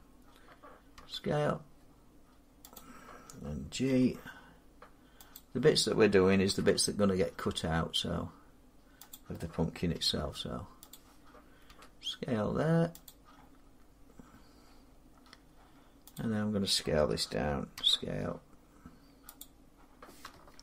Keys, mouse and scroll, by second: 0.8 s, 2.6 click, 3.8 g, 5.2 click, 6.3 s, 9.0 click, 9.8 g, 10.8 click, 11.5 s, 12.9 click, 13.5-14.8 scroll down 6, 14.9 scroll up 1, 16.0 click, 16.0 middle click, 17.6 scroll, 17.6 s, 17.7 middle click, 19.2 click, 20.5 ctrl+z.